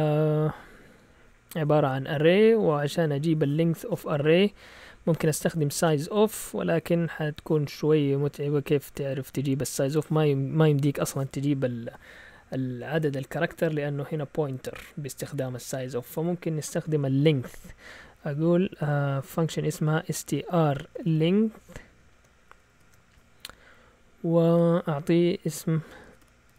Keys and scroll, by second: 19.5-21.5 typing, 22.7 typing, 25.8-26.5 typing.